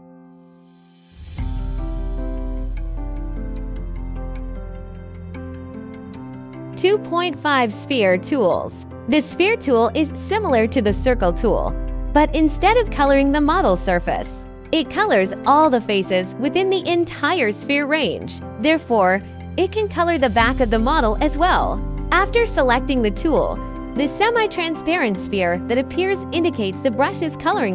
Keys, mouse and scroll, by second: 0.9 scroll, 2.4 click, 2.4-3.1 scroll, 4.2 click, 4.2-4.6 scroll, 4.6 click, 4.8 click, 5.3 click, 26.5 2.